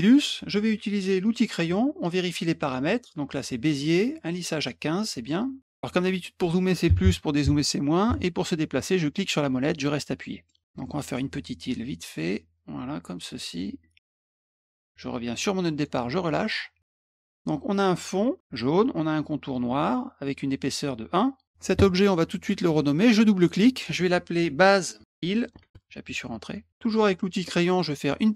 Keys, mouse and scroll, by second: 1.2 click, 5.2 middle click, 9.3-10.4 middle drag, 10.8 middle click, 11.7-15.8 drag, 16.5 middle click, 23.3 click, 23.5 click, 24.6-26.1 typing, 27.7 middle click.